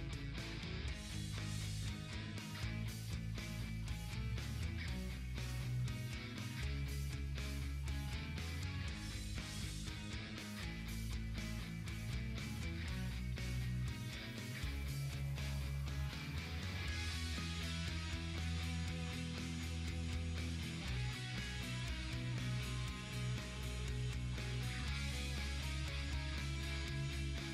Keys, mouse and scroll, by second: 0.0 Left, 1.9-2.6 typing, 3.7 click, 4.0 Left, 4.8 Up, 8.0 click, 10.6-11.4 typing, 11.0 click, 16.2-17.1 typing, 18.4-20.7 drag, 19.6-20.3 typing, 20.7 Right, 23.1 click, 23.2-25.3 typing, 23.4 click, 24.8 click, 25.4 Right.